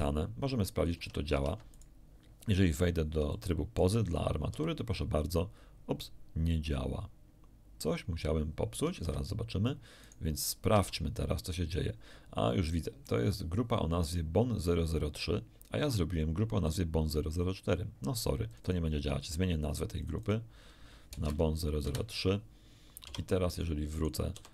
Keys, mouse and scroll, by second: 0.9 ctrl+Tab, 1.3 ctrl+Tab, 1.7 ctrl+right click, 2.8 middle click, 2.8 scroll up 1, 3.2 shift+middle click, 4.4 shift+r, 9.0 Escape, 10.0 right click, 10.7 Tab, 13.0-14.2 middle drag, 16.6 click, 18.4 click, 19.2 click, 19.8 click, 21.1 BackSpace, 21.8 Return, 21.8 3, 23.0 Tab, 23.9 right click, 24.3 r.